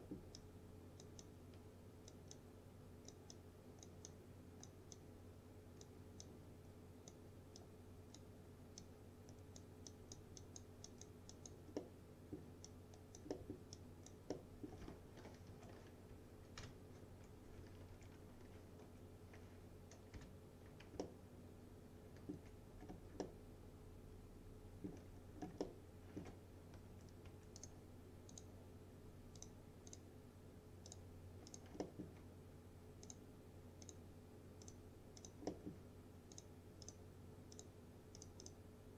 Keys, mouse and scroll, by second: 0.0 alt+middle click, 0.4-2.2 alt+drag, 6.6-7.2 alt+click, 7.9-8.2 alt+click, 9.2-9.8 alt+click, 11.8-12.5 alt+middle click, 12.7-13.3 alt+click, 13.4 alt+middle click, 13.8-15.0 alt+click, 14.4 alt+middle click, 15.6 F3, 16.7 ctrl+BackSpace, 18.0 ctrl+z, 18.9 F4, 20.2 BackSpace, 21.1-22.6 alt+middle drag, 22.9 scroll down 2, 23.3-25.1 alt+middle drag, 25.2-25.6 scroll up 2, 25.7-26.3 alt+middle click, 26.8-27.3 typing, 27.6 right click, 28.4 click, 31.9 alt+middle click, 33.1 click, 35.5 alt+middle click, 36.4 click.